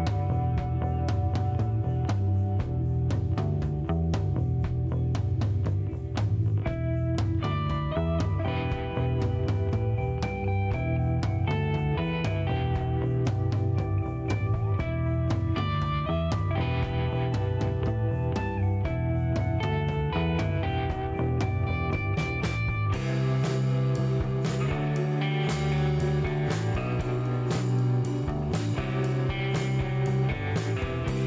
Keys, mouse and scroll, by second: 0.8 click, 4.5 click, 5.6 KP_7, 7.4 click, 8.9 scroll down 1, 9.3 middle click, 10.6 shift+right click, 11.8 shift+middle click, 12.4 shift+right click, 13.9 click, 14.6 space, 15.5 scroll down 2, 15.8 middle click, 17.0 shift+right click, 18.9 shift+middle click, 19.4 scroll up 1, 19.7-20.9 middle drag, 22.5 click, 23.7 click, 25.1 click, 27.4 shift+right click, 29.2 shift+right click, 30.5 shift+middle click, 31.0 shift+right click.